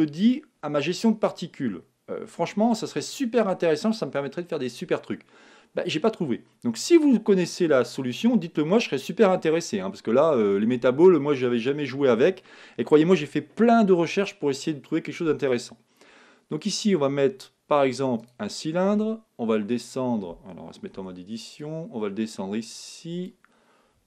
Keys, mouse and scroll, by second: 20.9 Tab, 21.6-23.5 drag.